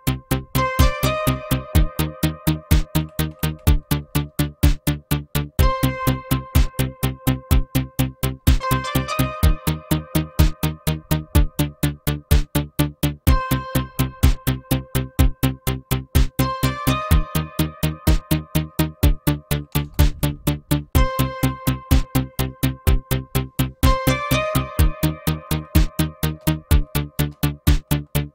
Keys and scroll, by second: 3.0 Insert, 3.3 Insert, 10.3 Insert, 19.7 BackSpace, 19.8 BackSpace, 20.3 Down, 20.8 Down, 20.9 Down, 25.4 Down, 25.6 Down, 26.2 space, 26.5 Down, 27.1 space, 27.3 Up, 27.8 Up, 27.8 Up.